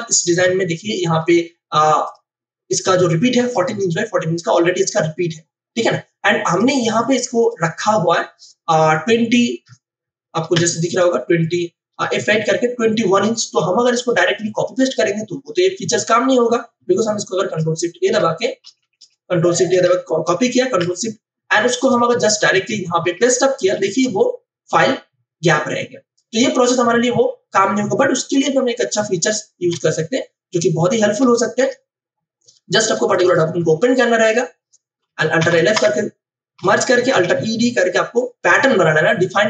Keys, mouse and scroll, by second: 0.4 ctrl+alt+i, 2.0 click, 6.5 click, 10.5 w, 10.9 click, 11.9 F8, 14.0 click, 17.3 ctrl+shift+e, 18.1 ctrl+a, 20.7 ctrl+c, 20.7 ctrl+w, 21.8 click, 22.5 v, 23.7 ctrl+alt+shift+v, 29.7 Delete, 31.5 ctrl+o, 33.1 click, 35.4 alt+l, 35.6 alt+f, 35.7 Return, 37.1 alt+e, 37.3 d.